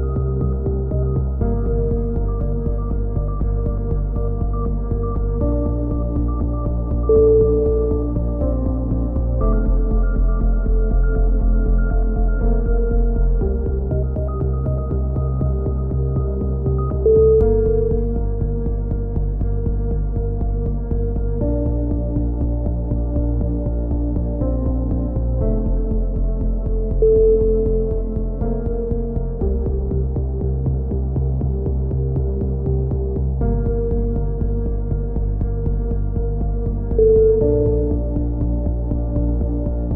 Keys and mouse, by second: 0.0 click, 0.4 KP_3, 0.5 z, 1.2 click, 1.3 middle click, 2.0 click, 2.7 click, 3.9 z, 5.2 click, 5.4 right click, 5.9 KP_3, 8.7 e, 9.6 click, 10.7 right click, 11.2 click, 12.0 right click, 12.5 click, 13.4 a, 14.0 click, 14.4 right click, 15.0 KP_7, 15.6 click, 16.4 z, 18.7 right click, 19.0 click, 19.5 click, 19.9 right click, 20.6 click, 20.9 a, 21.8 KP_3, 22.9 right click, 23.4 f, 23.4 a, 24.1 click, 25.1 right click, 25.2 click, 25.7 z, 25.9 a, 26.0 z, 26.2 click, 27.9 click, 28.0 KP_3, 28.4 right click, 29.1 right click, 29.4 e, 29.7 click, 30.2 click, 30.5 click, 31.4 right click, 31.4 g, 32.2 a, 32.9 right click, 32.9 f, 33.6 click, 34.5 click, 34.5 KP_7, 34.9 z, 35.1 click, 36.1-37.7 drag, 37.7 KP_7, 38.2 click, 39.0 KP_7, 39.3 click, 39.9 click.